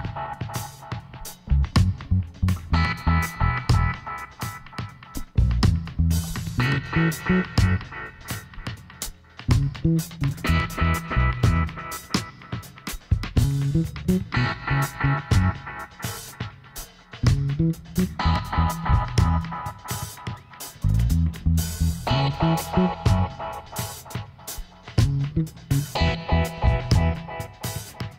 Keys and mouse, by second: 5.3-7.4 middle drag, 7.4 s, 12.7 middle click, 15.5 s, 17.0 e, 18.9 Tab, 19.7 a, 20.3-22.6 right drag, 21.5 a, 22.7-23.9 middle drag, 23.9-26.3 right drag, 25.9 Tab, 27.1-28.1 right drag.